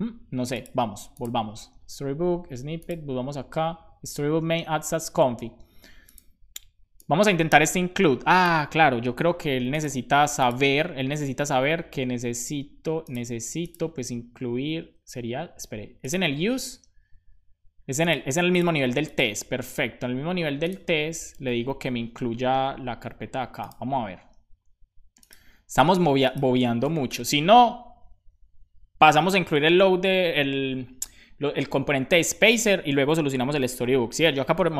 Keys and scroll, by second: 14.8 Return, 15.6 super+z, 21.3 super+v, 22.5 BackSpace, 22.7 super+s, 33.6 ctrl+c, 34.3 Return.